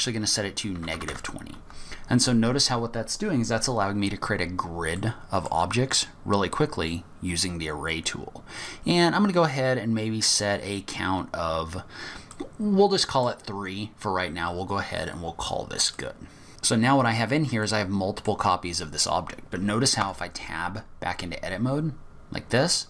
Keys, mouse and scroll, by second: 2.2-2.5 scroll down 2, 2.5-3.1 scroll up 2, 3.7-4.2 scroll down 3, 4.1-5.0 scroll up 2, 5.0 middle click, 5.8 scroll down 2, 6.0-6.4 scroll up 2, 8.6 click, 12.3 middle click, 15.9 middle click, 17.6 middle click, 20.0 Tab, 22.5-22.8 scroll up 3.